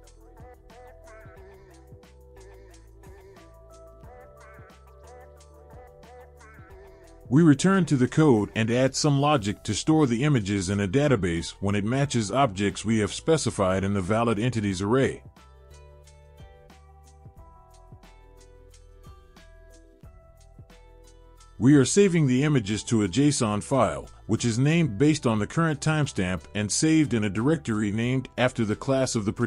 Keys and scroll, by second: 18.7 Down, 21.0 Return, 21.4 ctrl+v.